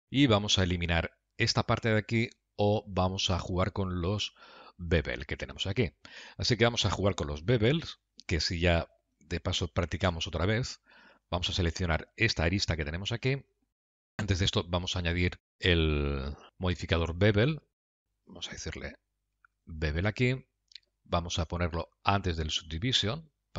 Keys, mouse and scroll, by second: 5.3 middle click, 7.6 middle click, 10.2 2, 11.3 click, 14.7 Tab, 15.2 Tab, 17.9 click, 23.0 click.